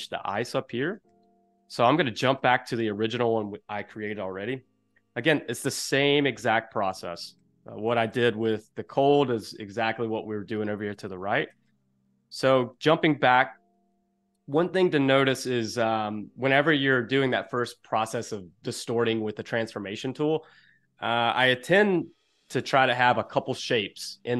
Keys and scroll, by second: 2.3 space, 5.4 Escape, 7.6 space, 9.0 space, 11.5 space.